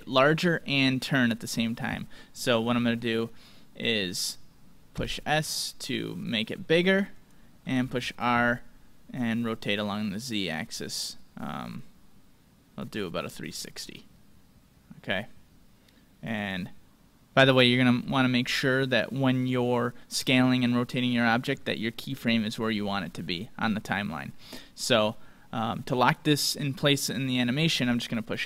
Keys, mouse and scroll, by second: 4.9 s, 7.8 r.